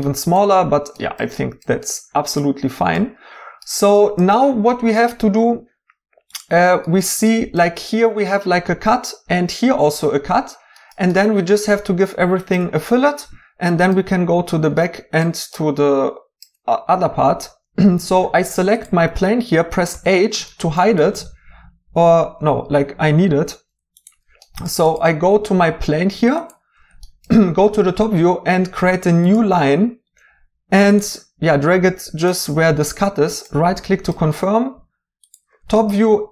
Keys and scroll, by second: 19.9 h.